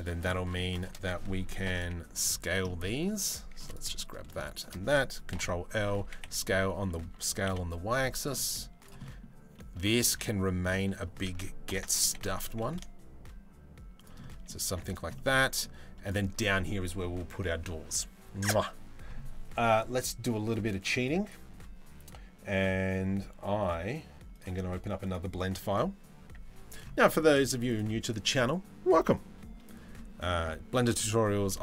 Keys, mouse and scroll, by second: 1.3 ctrl+l, 2.3 middle click, 2.7 click, 3.2 3, 3.6 middle click, 4.2 shift+middle click, 4.9 ctrl+l, 4.9 ctrl+;, 5.6 s, 6.6 s, 8.0 middle click, 8.7 middle click, 9.2 middle click, 9.9 middle click, 11.3 ctrl+l, 11.7 g, 13.8 middle click, 14.3 Tab, 14.8-15.2 middle drag.